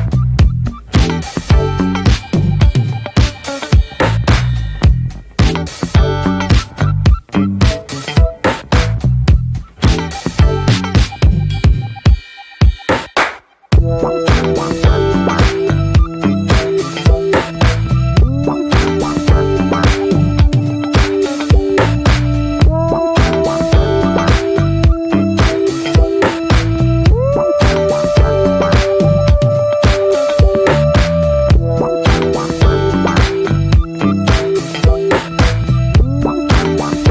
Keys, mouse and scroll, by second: 0.5-0.9 scroll up 1, 0.9 e, 2.1-2.5 middle drag, 2.5 ctrl+b, 3.5 Tab, 3.5 click, 3.7 scroll down 3, 3.9-4.5 middle drag, 4.5 ctrl+s, 4.6 middle click, 5.3 scroll up 2, 5.5 shift+middle drag, 5.7 Tab, 5.9-6.9 middle drag, 6.9 ctrl+r, 7.6-8.0 middle drag, 8.0 s, 10.3 scroll down 1, 10.5 middle click, 11.1 Tab, 11.4-12.5 middle drag, 12.5 ctrl+s, 12.7-14.3 middle drag, 14.3 Tab, 14.6 middle click, 14.8 scroll up 1, 15.0-16.0 middle drag, 16.0 ctrl+r, 18.3 middle drag, 18.7-19.1 alt+middle drag, 19.4 alt+z, 19.5-20.4 scroll down 1, 20.4 click, 21.2 1, 22.4-23.6 drag, 23.8 alt+shift+click, 24.5 alt+shift+click, 26.1 click, 26.9 middle click, 27.2 alt+z, 27.5-28.2 shift+middle drag, 28.2 ctrl+e, 28.7 middle click, 29.2 ctrl+r, 30.7-31.1 middle drag, 31.1 3, 31.2 click, 31.5-31.9 scroll up 1, 31.9 alt+shift+click, 32.1 alt+shift+click, 32.5-32.9 shift+middle drag, 32.9 scroll up 1, 33.1-34.2 shift+middle drag, 34.2 e, 35.4-35.8 middle drag, 35.8 shift+scroll up 2, 36.1-37.1 middle drag.